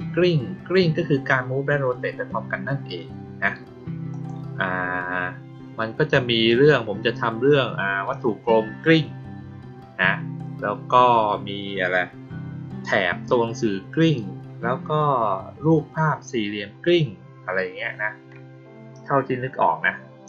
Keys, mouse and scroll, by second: 4.0 click.